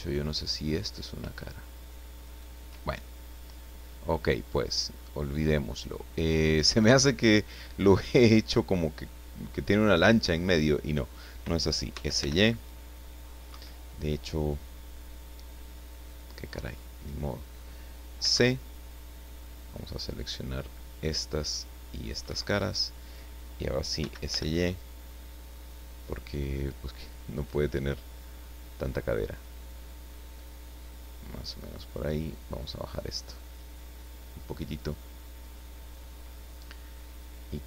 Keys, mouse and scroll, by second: 2.2 shift+right click, 2.8-3.4 shift+scroll down 1, 3.6-6.6 middle drag, 11.9 s, 12.1 y, 13.5 Escape, 16.0 click, 16.5-17.7 middle drag, 18.2 c, 18.8-22.3 drag, 22.3 Escape, 24.0 s, 24.3 y, 27.3 click, 27.8-29.5 middle drag, 30.7-33.7 drag, 33.7-35.7 middle drag, 36.3-36.6 scroll up 1.